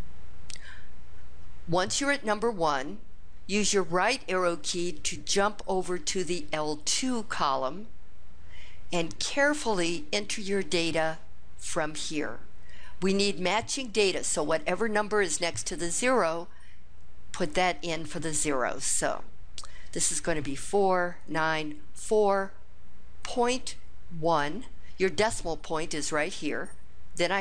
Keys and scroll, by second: 5.5 Right, 20.1 4, 21.0 9, 21.8 4, 23.0 ., 24.1 1.